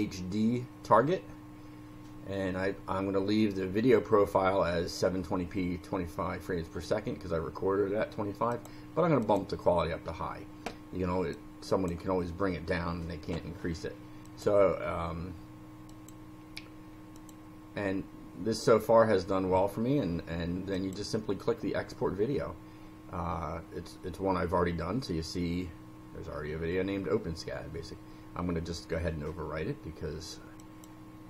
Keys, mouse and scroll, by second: 8.5 click, 9.2 click, 11.3 click, 14.2 click, 15.9 click, 17.1 click, 20.7 click, 30.6 click.